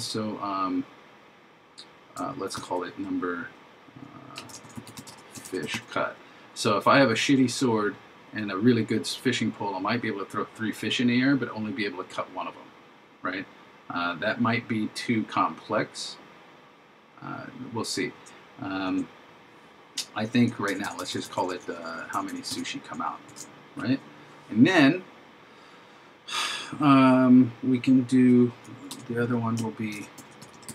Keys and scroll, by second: 2.6 shift+3, 4.7 shift+f, 5.6 shift+c, 18.8 shift+0, 23.3 shift+0, 30.0 shift+p.